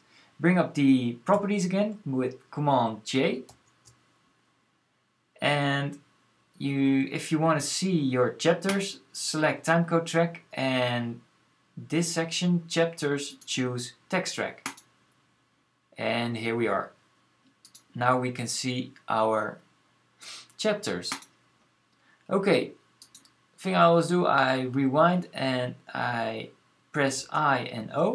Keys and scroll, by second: 3.2 super+j, 26.9-27.5 typing.